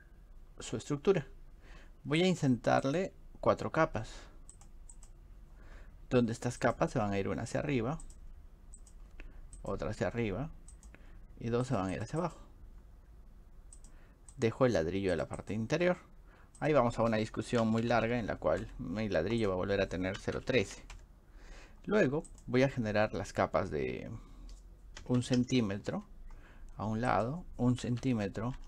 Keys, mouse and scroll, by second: 2.3 click, 2.8 click, 4.6 click, 6.7 click, 8.0 click, 8.8 click, 9.6 click, 10.8 click, 11.7 click, 14.3 click, 15.5 click, 19.4 click, 22.3 click, 27.1 click.